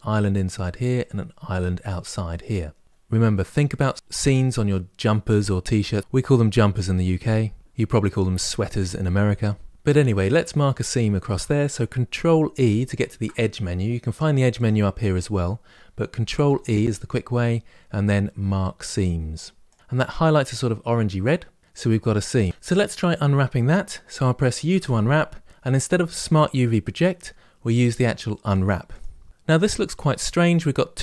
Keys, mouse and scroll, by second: 13.6 ctrl+e, 22.5-28.7 middle drag.